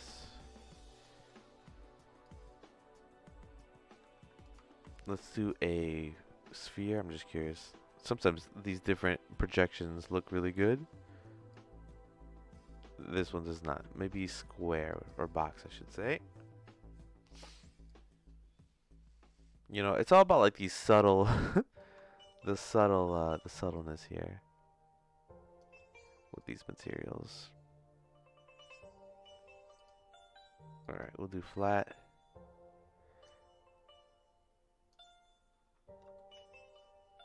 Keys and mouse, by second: 0.5 middle click, 1.5 middle click, 2.2-4.4 drag, 4.7 ctrl+z, 5.3-6.6 drag, 10.9 middle click, 11.5-13.2 drag, 13.7 ctrl+z, 14.2 click, 17.8-20.8 drag, 21.7-22.8 shift+drag, 23.7-25.6 shift+drag, 26.3-28.7 drag, 29.7-31.0 drag, 33.2-34.9 drag, 36.1-37.2 shift+middle drag.